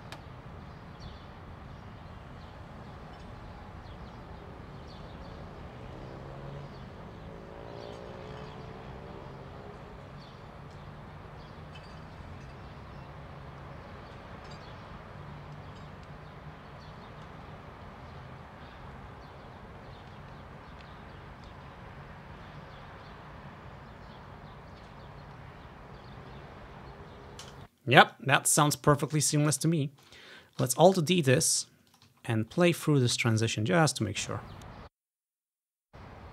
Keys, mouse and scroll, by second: 3.9 ctrl+scroll down 1, 19.4-20.8 scroll down 1, 21.9-22.3 shift+scroll up 2, 22.3 shift+scroll down 2, 22.9 scroll up 2, 27.5 space, 28.2-30.0 drag, 29.9 ctrl+scroll down 1, 30.8 alt+d, 31.4 click, 31.7-33.1 drag, 32.3-33.1 ctrl+scroll up 1, 33.5 click, 34.0 space, 34.8 alt+d, 35.0 click, 35.4-36.2 ctrl+scroll up 1, 35.8 alt+d.